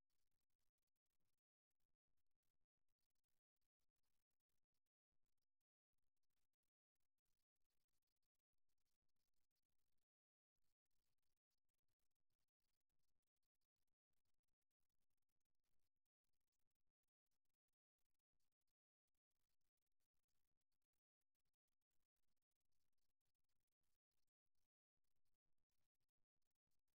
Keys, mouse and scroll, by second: 0.0-2.0 middle drag, 2.2-5.4 drag, 5.4-7.2 middle drag, 10.2-13.2 drag, 14.4-17.6 middle drag, 17.6 click, 18.2-22.0 drag, 22.0 middle click, 24.6-26.9 middle drag.